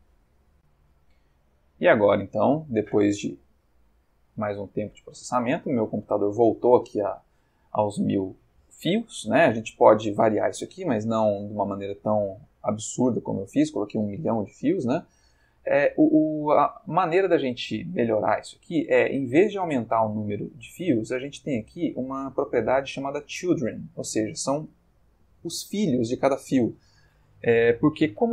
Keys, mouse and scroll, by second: 0.5 click, 1.8 click, 3.6 middle click, 4.0 click, 4.3 ctrl+middle click, 4.5-5.4 ctrl+middle drag, 5.5-6.9 ctrl+middle drag, 15.9-16.9 ctrl+middle drag, 16.9-18.2 ctrl+middle drag, 21.4 middle click.